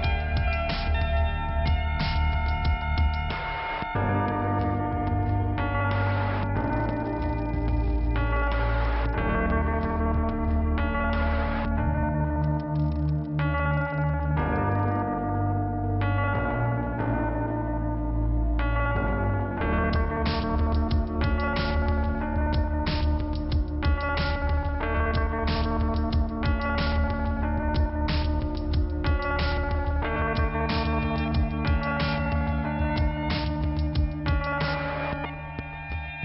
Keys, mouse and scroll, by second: 5.3 middle click, 6.8 scroll up 1, 10.9 click, 14.2 click, 14.3 click, 16.2 click, 17.6 click, 20.0 scroll up 1, 20.8 click, 21.0 click, 21.6 click, 29.8 click, 31.0 click, 33.1 click, 34.2 click, 35.4 click.